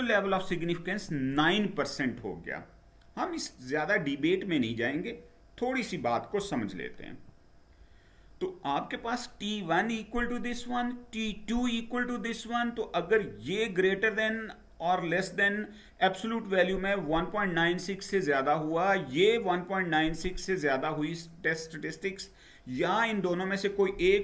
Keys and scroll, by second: 7.0 Down.